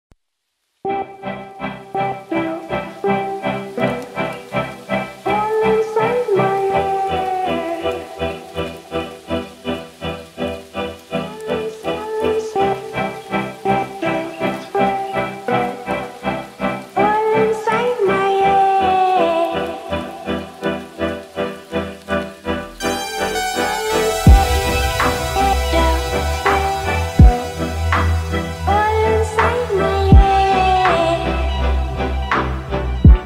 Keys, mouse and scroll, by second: 1.6 scroll down 1, 2.8-3.4 drag, 7.0 scroll up 1, 8.1 click, 12.7 shift+click, 13.7 ctrl+d, 15.1-16.0 drag, 22.1 click, 24.7-31.3 drag.